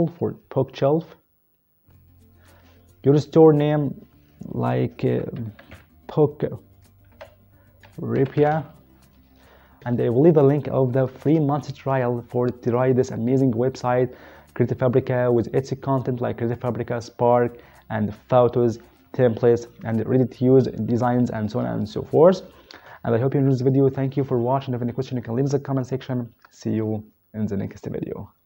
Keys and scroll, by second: 5.1-5.7 typing, 7.1-8.5 typing.